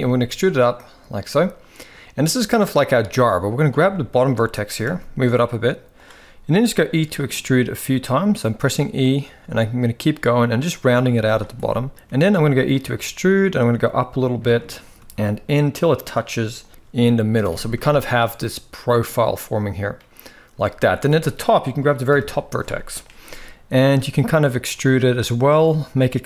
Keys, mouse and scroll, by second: 1.0 shift+middle click, 2.7 shift+middle click, 3.3 click, 3.6 shift+middle click, 4.3 g, 7.0 e, 7.8 e, 8.0 e, 8.9 e, 11.3 shift+middle click, 11.3 z, 11.9 e, 12.5 e, 13.9 e, 15.0 e, 16.5 shift+middle click, 17.3 a, 17.5 shift+middle click, 19.0 middle click, 20.3 shift+middle click, 20.8 click, 21.8 KP_1, 22.5 shift+middle click, 24.2 e, 25.4 e.